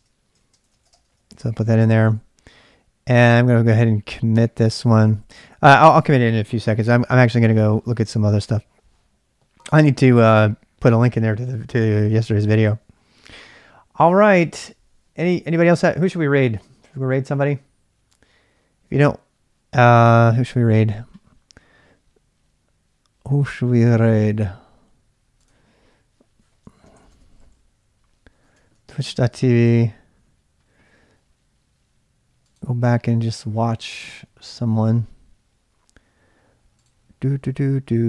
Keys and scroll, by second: 0.0-6.4 typing, 0.7 ctrl+[, 26.6-29.7 typing.